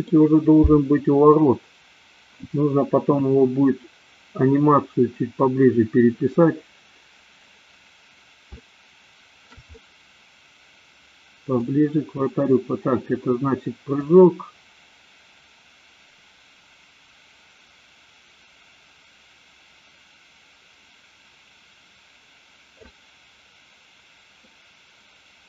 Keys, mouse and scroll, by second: 8.6-9.6 shift+middle drag, 9.7-11.7 middle drag, 14.2-23.1 drag, 24.5-25.4 middle drag.